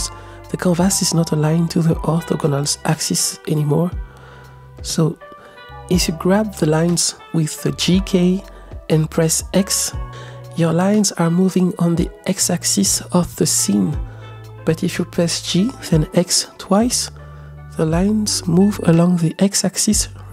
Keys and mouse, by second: 1.2 g, 2.2 drag, 2.4-3.4 middle drag, 5.1-5.8 middle drag, 6.2 g, 7.5 x, 11.0-12.4 middle drag, 12.8 ctrl+z, 13.2 ctrl+z, 13.9-14.5 middle drag, 15.1 g, 15.4 x, 16.0 x.